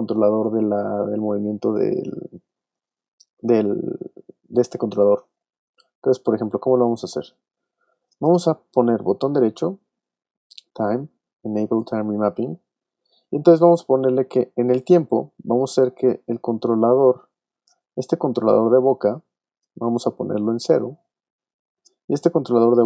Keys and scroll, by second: 1.1 space.